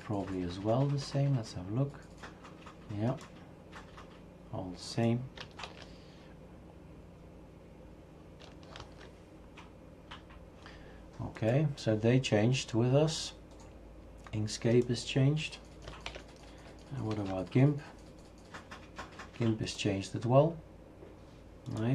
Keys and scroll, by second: 5.6 shift+super+q, 8.8 super+F3, 16.1 shift+super+q, 17.2 super+F4.